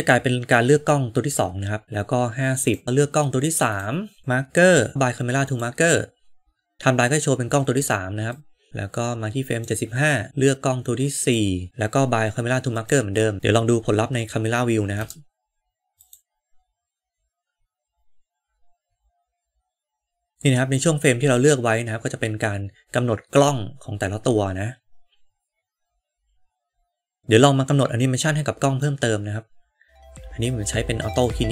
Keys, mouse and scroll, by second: 3.5 click, 4.2-5.5 drag, 8.2-9.6 drag, 11.1 click, 11.9 click, 14.8 KP_0, 16.0 click, 27.2-28.9 middle drag, 31.0 click.